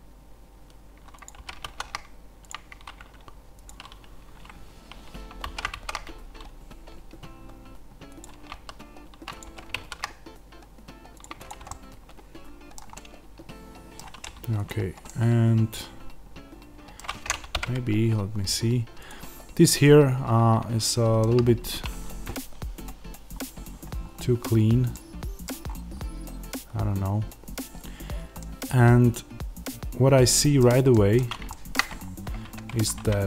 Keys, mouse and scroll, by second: 1.1 click, 1.3 g, 2.4 click, 5.3 alt+d, 8.1 click, 8.5 s, 9.3 click, 9.3 g, 11.1 click, 11.6-14.5 middle drag, 14.5 click, 15.0-16.9 middle drag, 16.9-17.4 scroll down 1, 17.4 KP_0, 19.0 click, 20.8 shift+middle click, 23.2-23.9 scroll up 1, 24.8 middle click, 25.4 scroll down 1, 25.6-27.9 scroll up 1, 27.9-28.3 scroll down 1, 28.3 middle click, 31.4 shift+middle click, 31.8-32.3 scroll up 1, 32.3 Tab, 33.1 click.